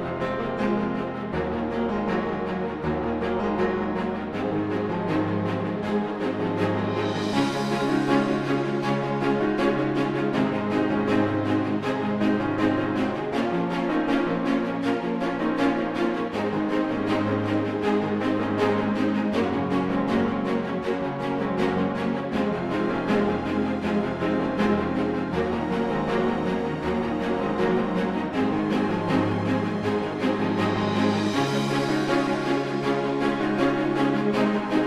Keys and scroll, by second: 31.6 space.